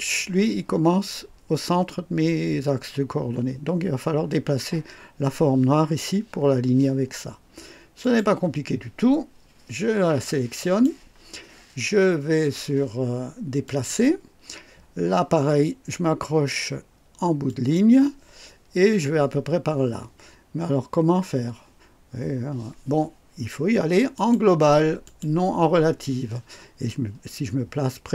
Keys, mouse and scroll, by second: 8.0 click, 10.6 click, 13.6 click, 17.5 click, 24.1 click, 25.0 click.